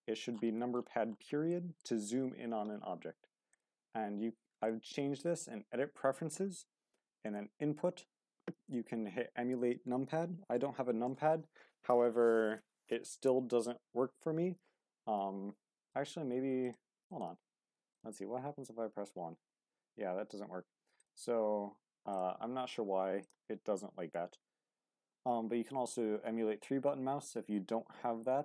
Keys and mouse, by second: 1.5 shift+middle drag, 3.6-19.3 drag, 19.3 1, 21.0-22.9 drag.